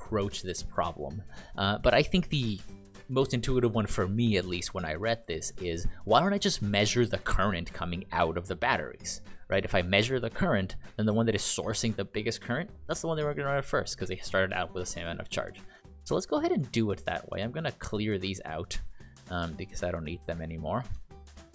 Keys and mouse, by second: 20.0 click, 20.4 click, 21.1 ctrl+click.